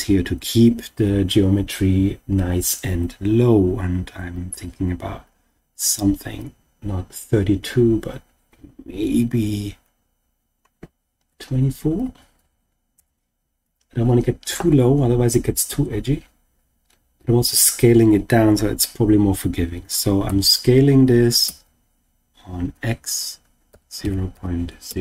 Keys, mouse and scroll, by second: 16.7-17.5 scroll down 2, 20.2 s, 21.4 x, 23.7 0, 24.0 ., 24.3 0, 24.8 5.